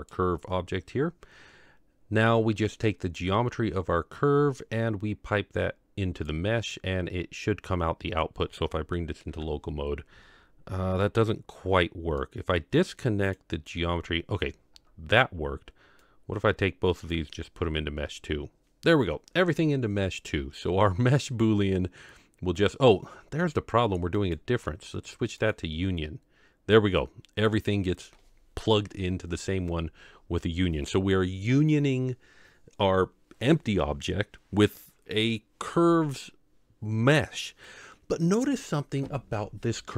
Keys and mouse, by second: 5.1-6.3 drag, 9.3 KP_Divide, 12.3-13.5 drag, 16.1-17.3 drag, 24.3-25.5 drag.